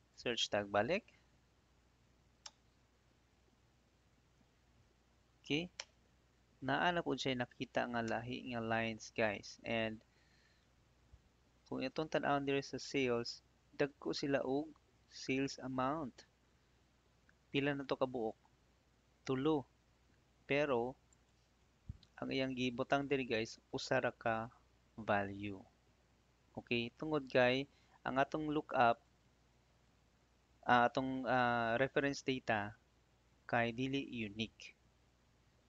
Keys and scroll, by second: 0.9 ctrl+f, 2.4 Return, 5.7 Return, 8.0 Return, 9.7 Right, 10.7 Escape, 11.4 Right, 13.2 Right.